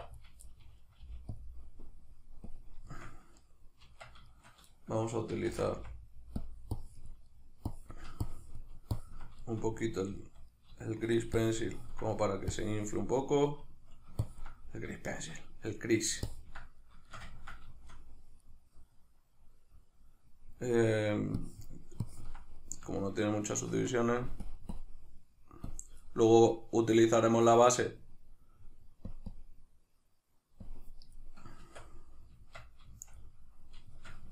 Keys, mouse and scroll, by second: 0.0 1, 0.2 right click, 0.5 middle click, 1.0 g, 1.4 click, 2.9-6.5 shift+middle drag, 3.8 Tab, 5.5 shift+c, 5.8 f, 6.5 click, 7.3 middle click, 7.7-9.4 drag, 9.4-11.4 shift+middle drag, 11.4 ctrl+click, 12.1 middle click, 12.6 click, 13.3-14.3 middle drag, 14.3 ctrl+click, 15.1-16.3 shift+middle drag, 16.3 ctrl+click, 16.8-21.4 shift+middle drag, 21.4-22.6 drag, 22.6-24.5 middle drag, 23.7 Tab, 24.5-31.2 drag, 31.2-34.3 middle drag, 31.6 Tab.